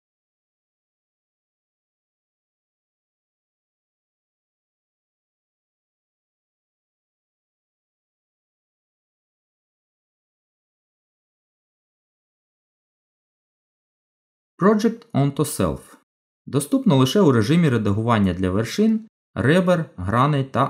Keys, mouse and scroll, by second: 2.8 middle click, 7.8 Tab, 9.8 click, 12.1 click, 20.4 middle click.